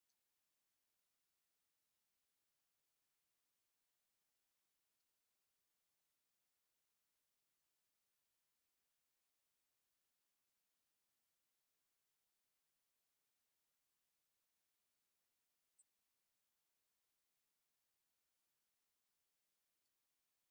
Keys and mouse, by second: 4.9-8.9 drag, 10.3-17.9 drag, 19.1 click, 19.5 click, 19.9 click.